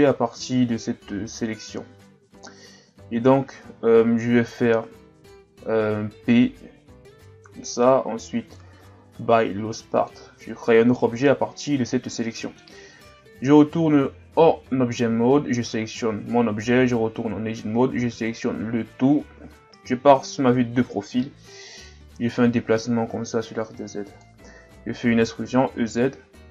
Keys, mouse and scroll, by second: 7.2 p, 11.0-13.1 middle drag, 13.1 Tab, 13.6 right click, 14.3 Tab, 15.1 Tab, 16.7 Tab, 18.0 a, 18.3 a, 18.6 a, 19.4 KP_3, 20.5-21.5 scroll up 1, 21.5 click, 25.2 e.